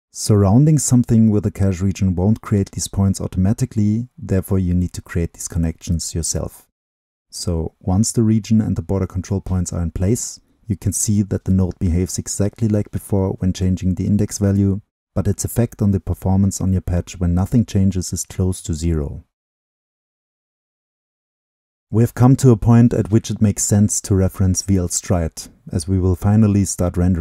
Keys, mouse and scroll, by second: 3.9-4.8 scroll down 2, 7.6 click, 7.9-10.2 drag, 11.2-18.3 drag, 20.5 double click, 22.9 click, 25.1-27.2 drag.